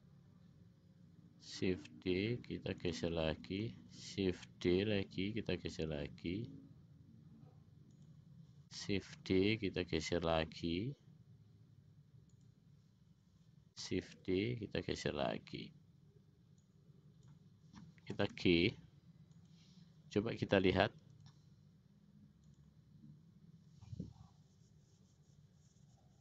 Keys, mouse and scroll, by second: 4.3 shift+d, 9.4 shift+d, 14.4 shift+d, 18.5 g, 21.2 click, 22.6 click.